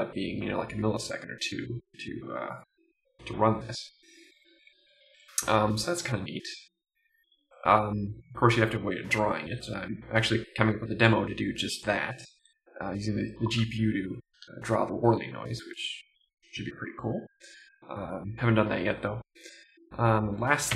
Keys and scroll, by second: 4.6 Up, 4.9 Right.